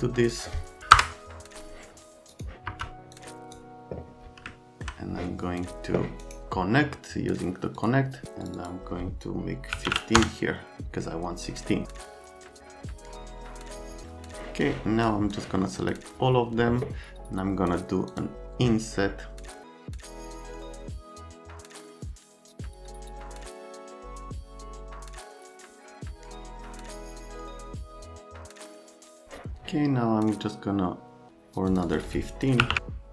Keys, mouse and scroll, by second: 0.8 Down, 0.9 Return, 2.7 F3, 3.1 middle click, 4.5 alt+middle click, 6.2 right click, 7.8 click, 8.4 click, 8.5 click, 9.8 KP_1, 9.9 KP_5, 10.2 KP_Enter, 14.6 click, 15.3 click, 18.1 click, 19.9 click, 20.2 click, 20.8 click, 21.6 middle click, 23.0-24.0 typing, 23.6 Delete, 24.1 Return, 26.9 click, 27.5 click, 27.9 middle click, 28.2 F3, 28.3 middle click, 28.5 middle click, 29.0 ctrl+i, 31.7 click, 31.8 click, 32.6 KP_1, 32.7 KP_5.